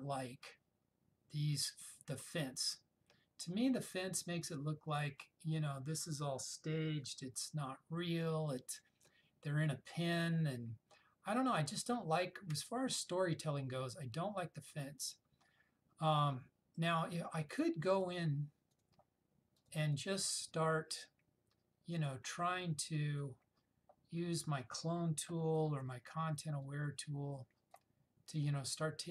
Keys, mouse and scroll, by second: 18.8 click, 23.3 click, 25.5-26.5 typing, 26.7-27.9 drag.